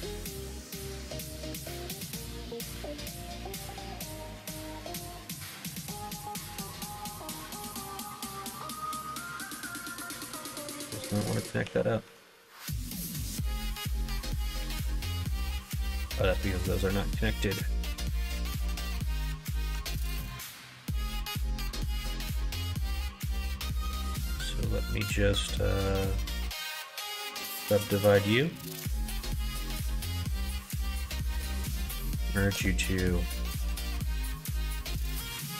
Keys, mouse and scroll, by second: 0.1 middle click, 0.7 middle click, 1.5 k, 10.5 middle click, 11.6 2, 12.0 1, 12.3 click, 13.2 g, 15.1 middle click, 15.6 ctrl+z, 20.2 g, 22.0 click, 22.8 click, 23.4 2, 23.7 click, 26.9-29.9 right drag, 30.6 1, 32.5 ,, 33.8 m.